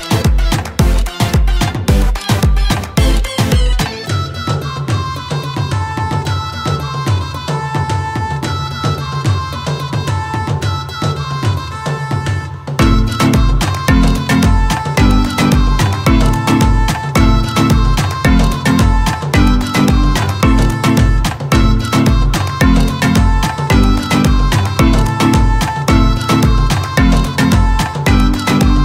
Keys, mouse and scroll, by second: 0.0 m, 1.3-2.5 typing, 3.8 l, 5.6 space, 5.9 e, 7.3 scroll down 1, 7.5 scroll up 1, 8.1 r, 8.4 space, 9.5 click, 10.1 m, 11.1-13.4 typing, 14.4 click, 14.8-15.2 scroll down 1, 15.2-15.8 scroll up 1, 15.8 scroll down 1, 15.8 l, 16.8 scroll down 1, 17.0 space, 17.3 e, 19.4-21.7 typing, 22.1 click, 22.9 scroll down 1, 23.3 scroll up 1, 23.9-24.5 typing, 26.6 scroll down 2, 26.8-27.4 scroll up 1, 28.1-28.8 typing.